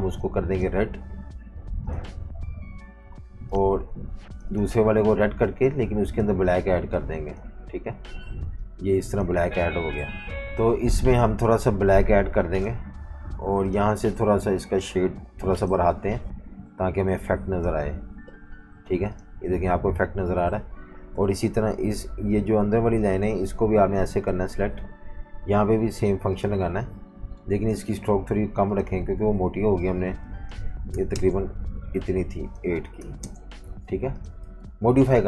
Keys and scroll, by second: 18.6 v, 21.1 i, 30.9 9, 31.1 Return, 33.0-35.2 typing.